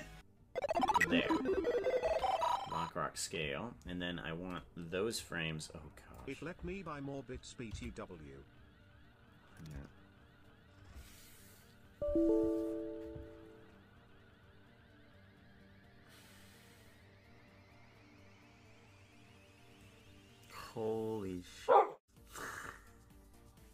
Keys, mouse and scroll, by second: 0.2 click, 2.0 i, 8.1 t.